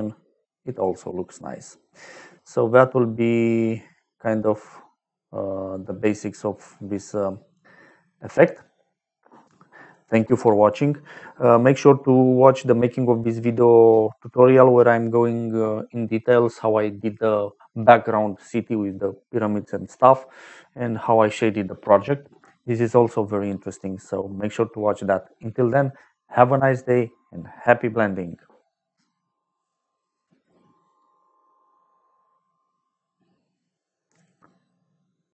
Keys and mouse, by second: 2.3 middle click, 4.3 middle click, 5.9 middle click, 7.0 middle click, 7.5 middle click.